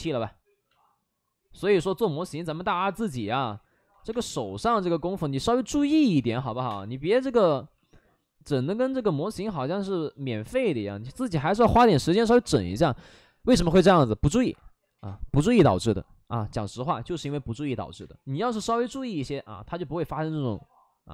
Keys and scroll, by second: 2.5 5, 2.5 space, 3.8 ctrl+z, 4.0 space, 6.0 ctrl+z, 6.1 ctrl+z, 6.5 3, 6.6 space, 7.6 x, 8.9 ctrl+z, 10.7 x, 11.9 space, 17.1 space, 17.2 2, 17.9 space, 20.4 4.